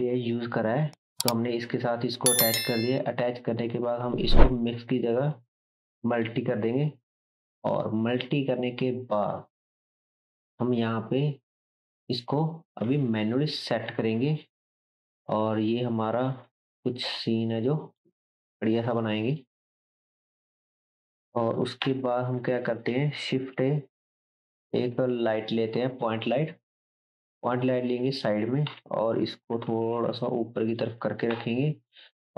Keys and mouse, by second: 20.0-22.9 drag, 20.0-22.9 middle drag, 21.8 KP_7, 23.3 shift+a, 23.5-26.4 drag, 23.5-26.4 middle drag, 27.1 g, 28.2-30.1 drag, 28.6 KP_1, 29.5 g, 30.1-32.3 middle drag, 30.1-32.3 right drag, 31.3 KP_7.